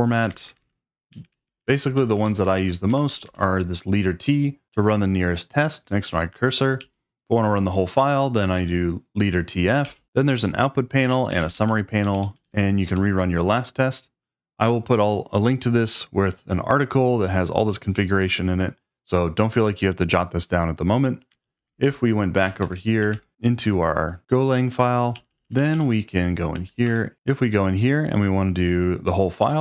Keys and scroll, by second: 0.0-3.7 typing, 6.8 j, 8.8 j, 9.8 j, 11.1-13.4 typing, 21.5 ctrl+a, 21.7 shift+n, 22.6 shift+;, 23.0 x, 23.1 Return, 25.1-27.6 typing, 26.8 Return.